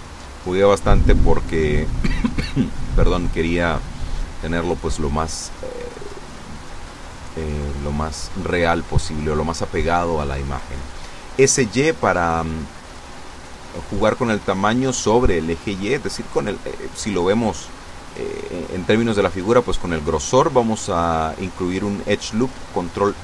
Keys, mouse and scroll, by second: 1.0 a, 3.7 b, 4.1 click, 6.3 s, 7.2 y, 9.0 click, 9.7-11.0 drag, 11.4 s, 12.1 y, 13.5 click, 17.8 ctrl+r, 18.8 click, 20.1 a, 21.1 b, 21.3 click, 22.6-23.2 drag.